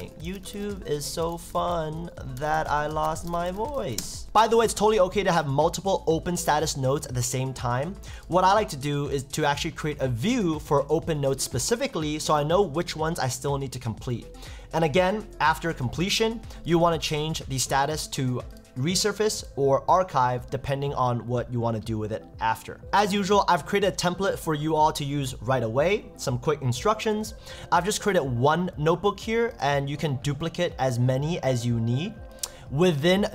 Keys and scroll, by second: 0.0 shift+y, 0.3 shift+t, 2.7 shift+i, 3.9 shift+1, 4.0 shift+space.